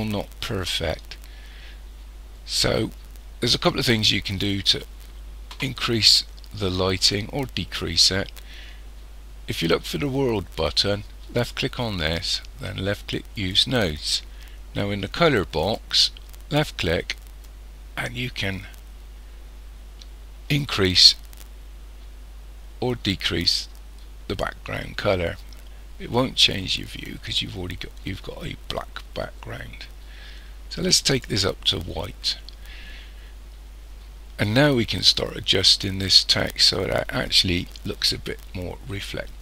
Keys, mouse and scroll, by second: 11.4 click, 13.3 click, 15.6 click.